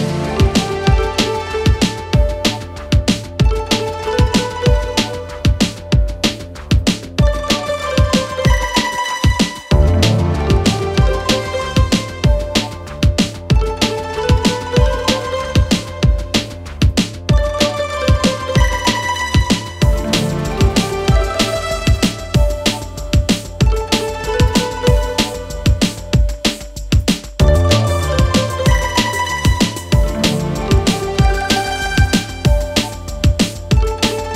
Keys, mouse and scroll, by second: 3.6 Return, 8.2 click, 14.0 shift+Num_Lock, 14.1 click, 14.5 shift+s, 16.4 t, 18.8-23.9 typing, 25.7 click, 28.2 ctrl+t, 30.0-34.3 alt+drag.